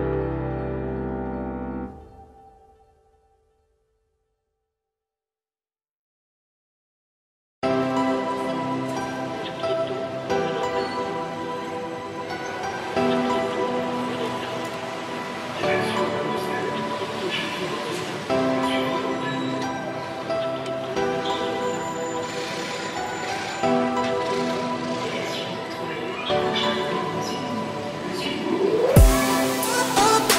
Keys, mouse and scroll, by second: 0.1 click, 0.4-1.2 scroll down 4, 1.2 shift+middle drag, 1.5-2.5 scroll up 4, 2.6-3.2 scroll down 3, 4.9 click, 5.1-5.8 scroll up 3, 6.0 r, 7.9 click, 8.2 scroll down 4, 8.6-9.4 scroll up 4, 9.7 click, 10.2-11.5 scroll down 4, 11.5 F3, 13.2 scroll down 1, 13.5 `, 14.4 scroll down 2, 14.9 z, 15.4 ctrl+click, 16.6 z, 17.6 z, 17.8 scroll down 1, 17.9 middle drag, 18.1 scroll up 4, 18.5 middle click, 18.7-19.4 scroll up 4, 19.4 s, 24.2 scroll down 2, 24.3-25.4 middle drag, 25.4-25.8 scroll up 2, 25.8 g, 29.2-29.9 scroll down 2, 29.9 scroll down 1, 30.0-30.3 middle drag.